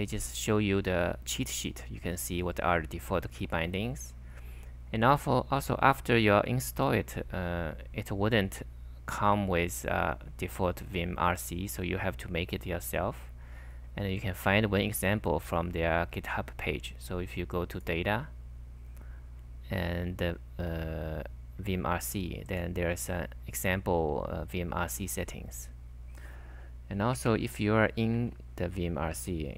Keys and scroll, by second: 27.2 super+Tab, 28.1 super+Tab.